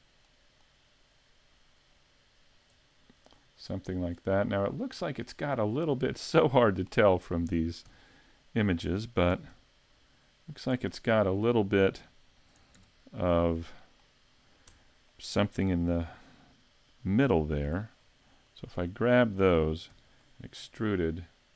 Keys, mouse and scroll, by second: 1.9 click, 3.3-3.9 scroll up 3, 3.9 scroll down 1, 4.5 middle click, 6.0-6.6 scroll up 2, 6.4 middle click, 7.9 s, 8.8 click, 9.4 s, 10.7 click, 10.9 middle click, 11.3-12.5 scroll up 2, 12.8 KP_Decimal, 13.3-13.9 scroll down 5, 13.7 middle click, 14.7 Tab, 15.1 middle click, 17.7 c, 18.9 right click, 19.9 e, 20.3 click.